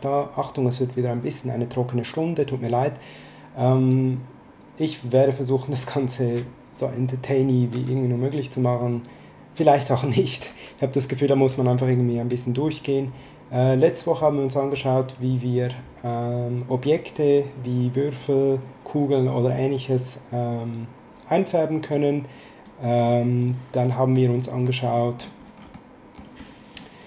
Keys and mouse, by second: 15.5 click, 21.8 click, 25.7 middle click.